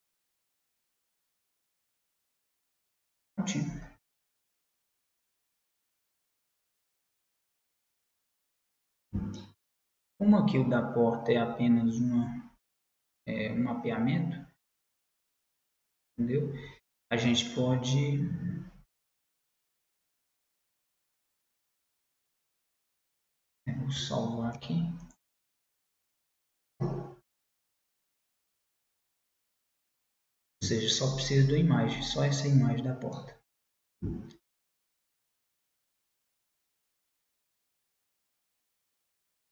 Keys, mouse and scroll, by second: 0.0 middle click, 3.9-7.4 middle drag, 7.6-9.5 drag, 9.5-11.4 middle drag, 15.5-18.7 middle drag, 19.2-21.2 middle drag, 24.5 ctrl+s, 33.2-36.8 middle drag.